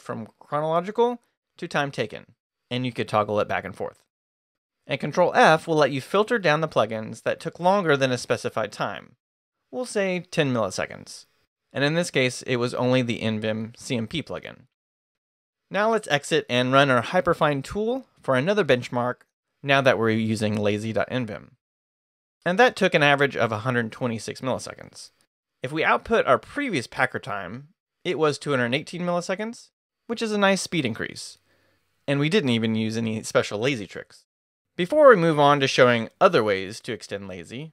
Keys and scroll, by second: 3.5 ctrl+s, 5.4 ctrl+f, 9.3 ctrl+BackSpace, 9.3-10.2 typing, 12.4 Escape, 12.9 shift+Escape, 13.0 shift+;, 13.5 shift+q, 13.9 Return, 16.1 Escape, 16.1-17.0 typing.